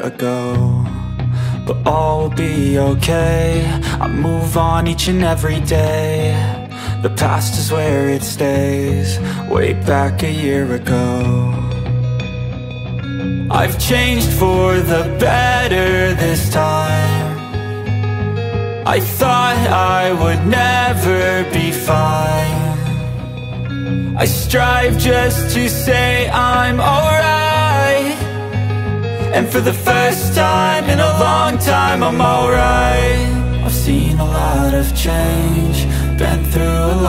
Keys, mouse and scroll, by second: 2.2 alt+scroll down 1, 2.5-4.6 typing, 2.6 click, 3.3 click, 3.9 alt+scroll up 1, 4.3 click, 5.1-7.5 drag, 7.5 space, 7.6 click, 7.9 space, 8.9 click, 10.0 space, 10.1 click, 10.3 space, 10.9 alt+scroll down 1, 11.3 space, 11.3 click, 11.6 space, 12.7 alt+scroll up 1, 13.0 space, 13.2 click, 13.7 alt+scroll up 1, 14.0 space, 14.1-16.3 drag, 16.2 scroll up 2, 16.6-18.4 typing, 16.8 click, 17.1 click, 17.5 alt+scroll down 3, 18.0 click, 18.4 click, 19.7 alt+scroll down 1, 20.0 space, 20.0 click, 20.4 space, 21.5 click, 21.5 space, 22.2 alt+scroll up 1, 22.6 space, 22.8 click, 23.0 space, 23.3 click, 23.3 space, 24.0 alt+scroll down 1, 24.6 space, 24.8 click, 25.0 space, 27.1 click, 28.6 alt+scroll down 1, 28.9 space, 29.8 alt+scroll up 1, 30.1 space, 30.2 click, 30.5 space, 31.1 alt+scroll up 1, 31.7 alt+scroll up 1, 32.7 click, 32.7 click, 33.1 alt+scroll down 1, 33.8-36.8 drag.